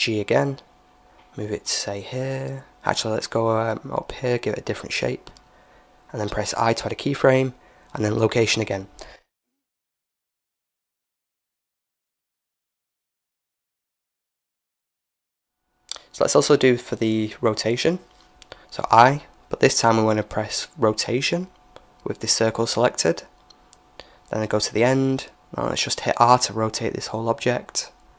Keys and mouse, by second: 0.3 g, 7.0 i, 9.7-11.4 drag, 15.1-16.1 drag, 16.1 middle click, 17.0-18.3 right drag, 23.6-25.5 drag, 26.2 r.